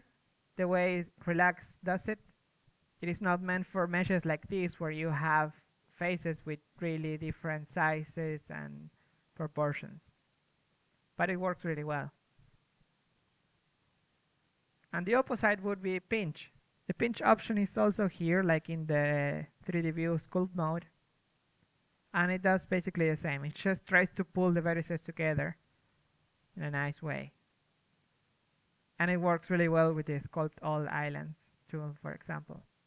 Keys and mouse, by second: 6.8 ctrl+z, 7.3 ctrl+z, 12.1 ctrl+z, 12.8 middle click, 15.0 ctrl+z, 21.5 ctrl+z, 26.0 ctrl+z, 26.1-32.8 drag, 26.9 ctrl+z, 28.8 ctrl+z, 30.3 ctrl+z.